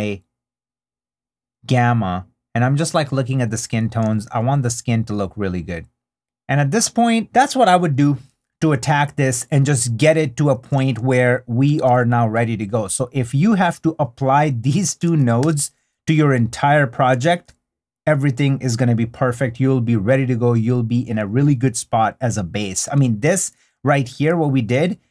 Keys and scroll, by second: 5.1 super+d, 7.2 super+d, 10.8 super+d, 16.4 super+d, 17.7 super+d, 24.1 super+d.